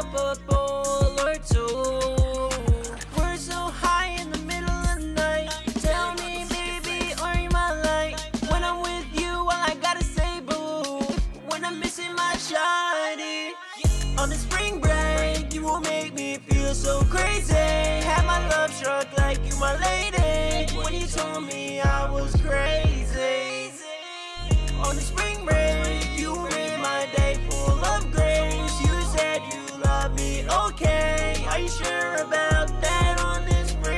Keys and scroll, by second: 7.2 super+Tab, 15.1-21.1 typing.